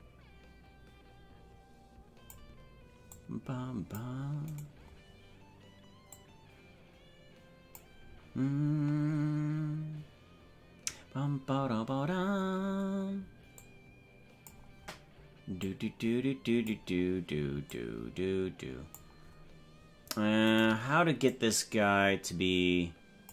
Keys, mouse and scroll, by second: 3.2 click, 4.6 right click, 6.1-7.8 drag, 13.6 click, 15.6-16.9 drag, 17.7-19.0 drag, 20.6 right click, 21.2-23.3 drag.